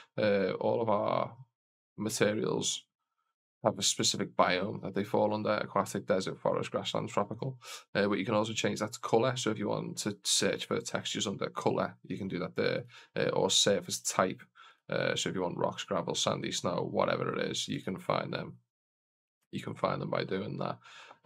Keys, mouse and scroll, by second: 3.8-7.0 drag, 7.2-8.3 drag, 8.8-12.5 drag, 12.6-14.0 drag, 14.5-17.1 drag, 17.6-18.9 drag, 19.4-21.2 drag.